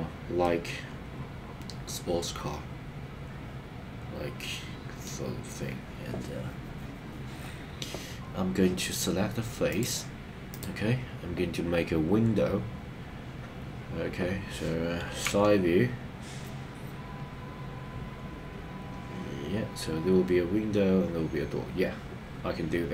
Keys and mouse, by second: 0.4-5.1 middle drag, 15.4 KP_3.